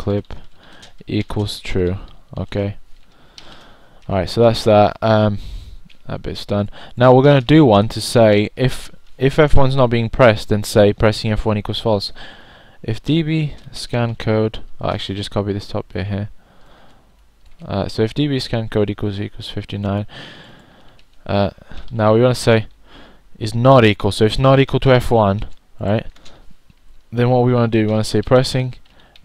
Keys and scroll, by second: 0.0-5.6 typing, 8.2-12.3 typing, 22.6 0.